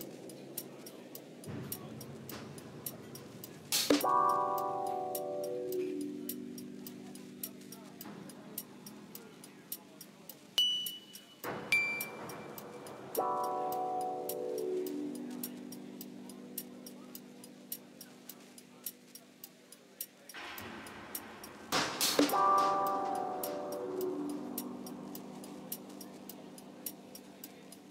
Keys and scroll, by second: 0.5 g, 1.2 g, 1.5 Caps_Lock, 2.0 g, 4.4 3, 5.2 Tab, 11.8 shift+d, 12.0 shift+z, 13.4 shift+d, 14.5 2, 14.9 Return, 15.4 r, 18.3 3, 18.7 Return, 19.1 1, 19.1 5, 19.2 Return, 23.0 shift+d, 23.1 shift+z, 23.8 g, 23.8 z, 26.3 g, 26.4 shift+z, 26.8 g, 27.5 r.